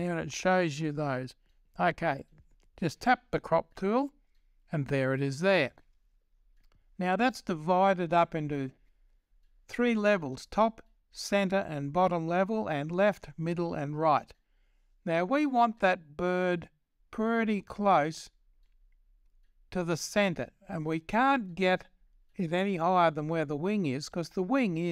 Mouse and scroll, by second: 0.0-24.9 drag.